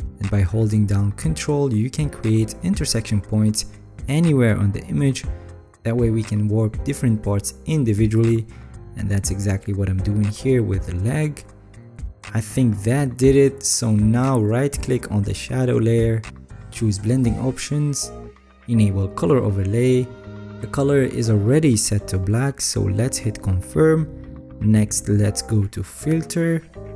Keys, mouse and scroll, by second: 1.0 ctrl+click, 1.9 ctrl+click, 3.3 ctrl+click, 13.0-13.6 alt+scroll down 7, 14.2 alt+scroll down 2, 14.8 alt+scroll.